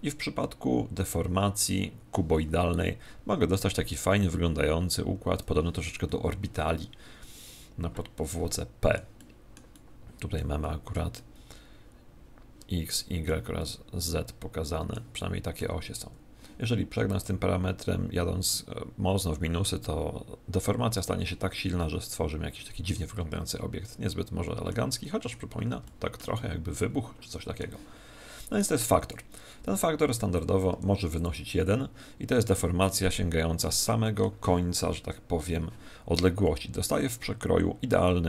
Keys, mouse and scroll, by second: 6.0-7.7 middle drag, 9.1-12.8 middle drag, 13.6-17.7 middle drag, 17.2-18.9 drag, 21.5-23.4 middle drag, 25.0-28.0 middle drag, 28.5 click, 32.4-34.3 middle drag, 34.9 KP_1.